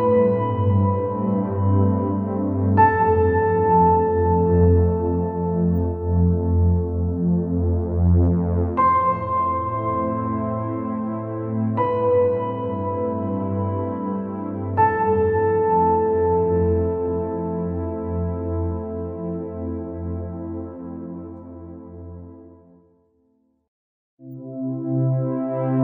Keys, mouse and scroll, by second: 0.3 scroll up 1, 0.5-1.3 scroll down 9, 1.3-2.6 scroll up 6, 3.0-3.6 scroll down 4, 3.6-4.0 scroll up 2, 4.2 KP_0, 5.2-5.7 scroll down 12, 6.3 KP_0, 7.5 KP_7, 8.5-9.1 scroll up 5, 9.2 click, 9.6 scroll up 3, 10.8 g, 13.3 KP_0, 14.8 KP_0, 16.4 g, 20.2 KP_0, 21.2 scroll down 2, 21.6 click, 22.3-23.0 scroll up 4, 23.3 scroll down 1, 23.5 click, 23.9 click, 25.1 g.